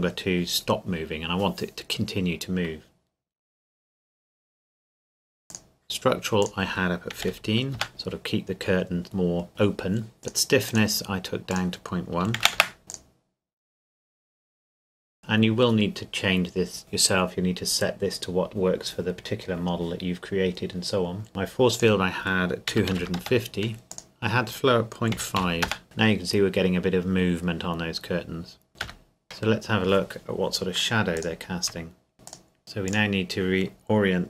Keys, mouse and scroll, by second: 5.5 click, 7.2 KP_1, 7.3 KP_5, 7.7 KP_Enter, 7.9 click, 10.2 click, 12.2 KP_Decimal, 12.4 KP_1, 12.5 KP_Enter, 12.9 click, 21.3 right click, 21.7 click, 22.7 KP_2, 22.9 KP_5, 23.2 KP_Enter, 24.1 click, 25.2 KP_Decimal, 25.4 KP_5, 25.6 KP_Enter, 28.8 KP_0, 31.2 click, 32.1 click, 32.8 click.